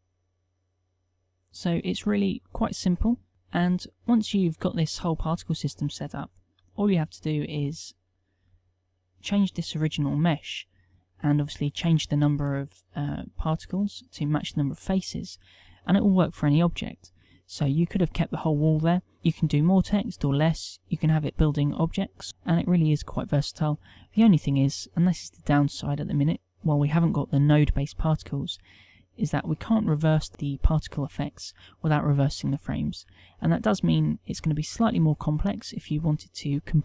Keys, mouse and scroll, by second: 6.8 Tab, 7.9 Tab, 8.6 Tab.